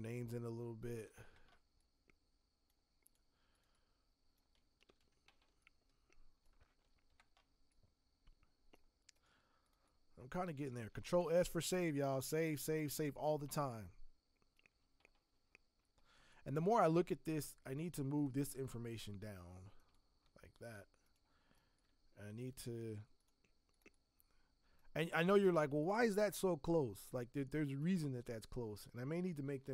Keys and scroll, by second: 4.9 ctrl+t, 10.9 ctrl+s, 16.2 space, 29.5 ctrl+t.